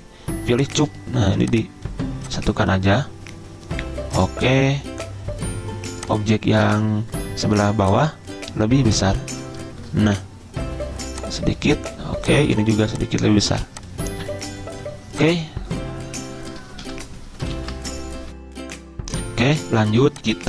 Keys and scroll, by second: 17.0 ctrl+End, 17.8 ctrl+z, 19.0 alt+Tab, 19.9 z.